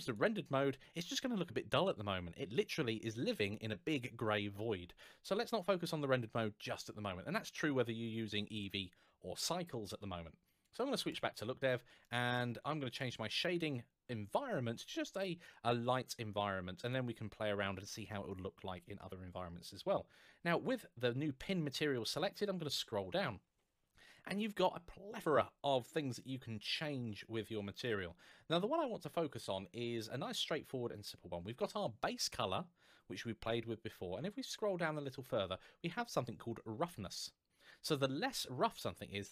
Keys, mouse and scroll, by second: 0.8 middle click, 2.0-2.4 scroll down 1, 4.8 scroll up 1, 10.9 click, 11.8 middle click, 12.7 click, 16.6 click, 22.5 scroll down 1, 25.9-26.3 scroll down 1, 27.6 scroll up 1, 29.3 scroll up 1, 31.2 scroll up 1, 34.0 scroll down 1, 39.1 click.